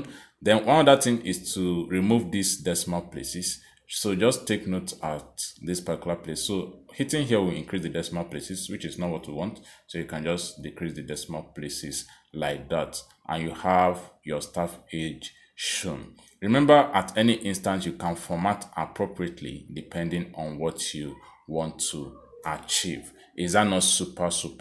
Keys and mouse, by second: 7.5 click, 8.3 click, 9.7 click, 10.2 click, 10.5 click, 10.9 click, 15.4 click, 17.5 click, 18.4 click, 19.2 click, 20.7 click, 21.7 click, 24.2 click.